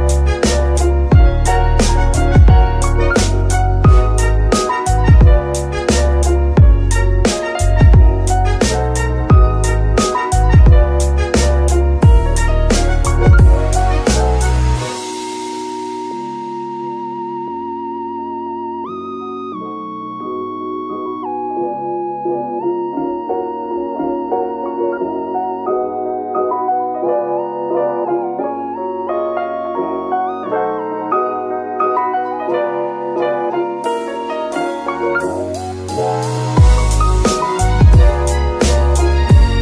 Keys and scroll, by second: 3.0 Escape, 3.4 g, 4.3 Escape, 5.2 g, 6.3 Escape, 8.7 r, 8.8 r, 11.1 Escape, 12.4 shift+r, 14.7 Escape, 15.0 r, 15.0 x, 17.7 Escape, 21.8 y, 23.9 Escape, 25.5 g, 29.9 Escape, 31.0 g, 33.3 z, 36.4 Escape, 39.0 alt+g.